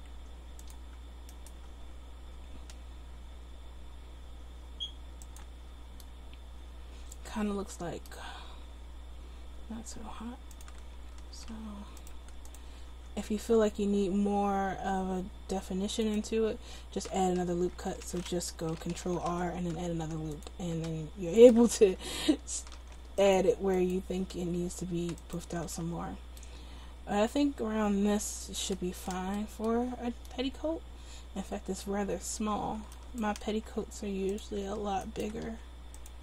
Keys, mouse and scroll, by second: 0.1 s, 1.9 s, 8.7 s, 11.4 ctrl+r, 13.0 s, 19.4 ctrl+r, 21.8 ctrl+z, 22.9 ctrl+r, 24.3 s, 25.7 ctrl+z, 33.0 right click, 33.7 s, 35.5 s.